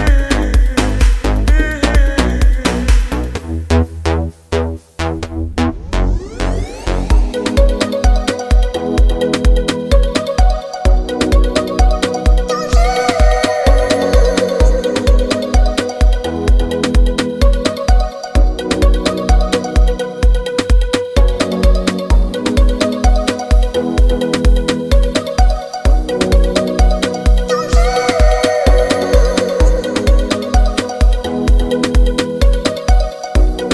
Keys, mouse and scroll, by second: 4.9 alt+Num_Lock, 5.0 alt+s, 9.3-13.7 drag, 14.6-16.9 drag, 17.1 ctrl+z, 18.8-23.9 drag, 23.9-29.8 shift+drag, 32.8 click, 33.0 shift+click.